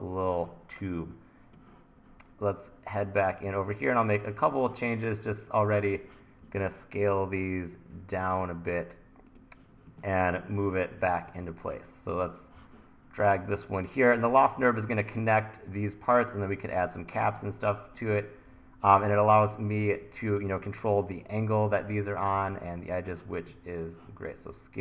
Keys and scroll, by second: 6.5 t, 9.9 1, 11.3 e, 17.0 1, 18.1 1, 18.5 e, 22.4 t, 23.2 super+z, 24.0 t.